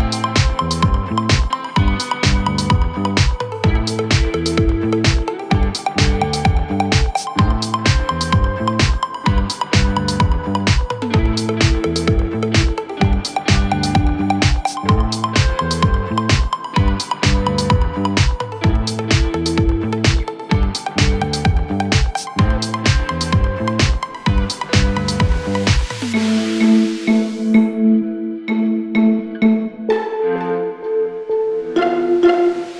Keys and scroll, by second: 0.1 g.